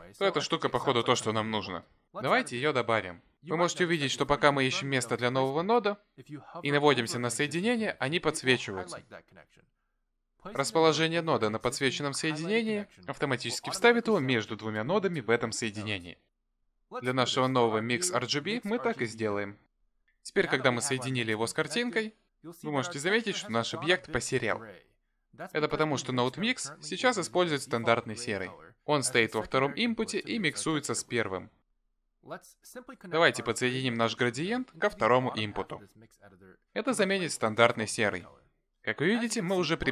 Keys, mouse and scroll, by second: 33.6 click.